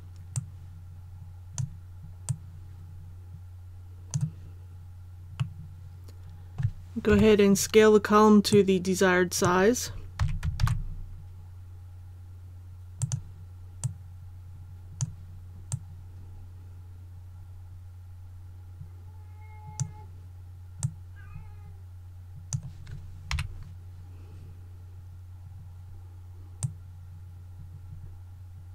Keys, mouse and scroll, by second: 0.3-4.4 drag, 5.3-7.0 middle drag, 7.0 KP_7, 8.4 click, 10.1 s, 10.6 shift+z, 12.9-23.3 drag, 23.3 KP_1, 25.3-26.5 scroll up 1, 26.5-28.7 drag.